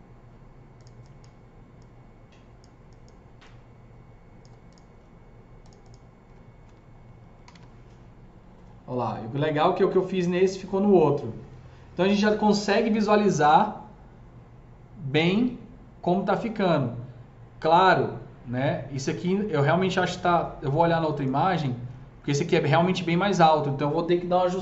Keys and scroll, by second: 6.3 F3, 7.0-7.9 typing.